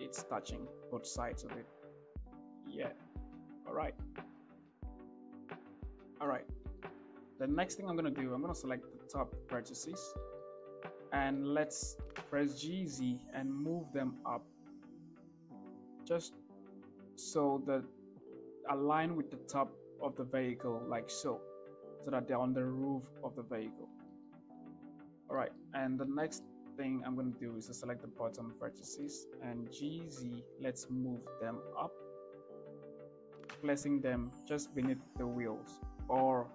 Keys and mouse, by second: 0.0 shift+click, 0.3-2.4 middle drag, 2.5 middle click, 3.6 shift+middle click, 5.7 shift+middle click, 6.4 shift+middle click, 6.6 middle click, 7.0 shift+middle click, 8.4 click, 10.0 shift+middle click, 11.0 shift+click, 12.0 g, 12.5 z, 23.7 shift+middle click, 24.3 shift+middle click, 25.0 shift+middle click, 25.8 shift+middle click, 27.1 click, 27.9 middle click, 28.4 shift+middle click, 29.2 g, 29.6 z, 32.3 shift+middle click, 33.7 g, 34.2 z.